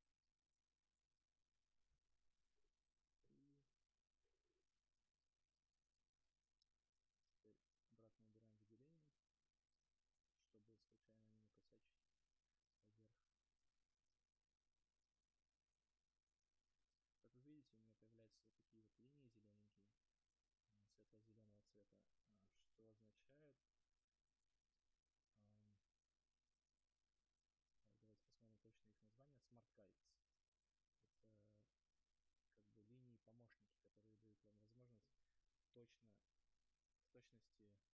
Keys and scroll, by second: 6.6 ctrl+z.